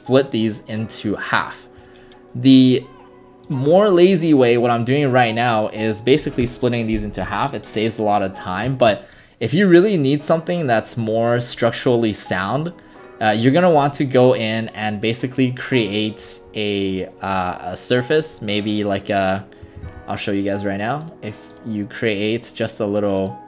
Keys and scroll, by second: 6.0-6.8 typing, 7.2 Delete, 19.9 ctrl+alt+w.